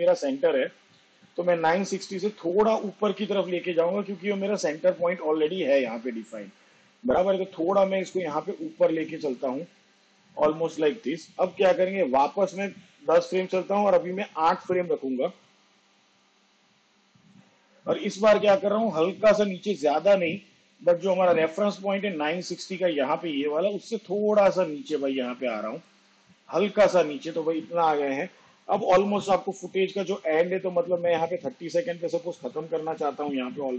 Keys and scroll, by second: 13.0 shift+Page_Down, 13.9 ctrl+Left.